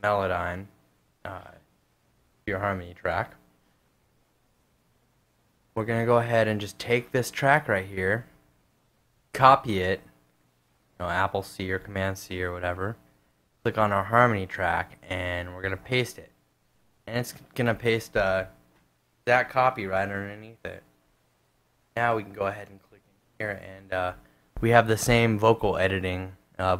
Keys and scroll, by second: 4.5 super+Tab, 9.0 super+c, 15.6 super+v.